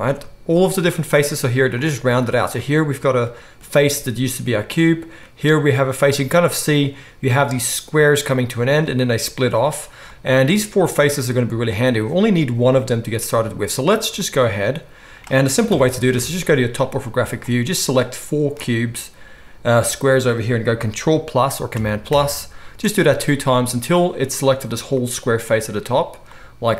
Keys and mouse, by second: 0.5 ctrl+shift+click, 0.5 ctrl+shift+middle click, 2.2-6.9 middle drag, 6.9-10.1 drag, 10.1-17.4 right drag, 15.6 KP_7, 16.1 alt+a, 21.6-22.7 ctrl+drag, 21.6-23.9 ctrl+middle drag, 21.6-22.7 ctrl+right drag, 21.7 ctrl+KP_Add, 22.1 ctrl+KP_Add.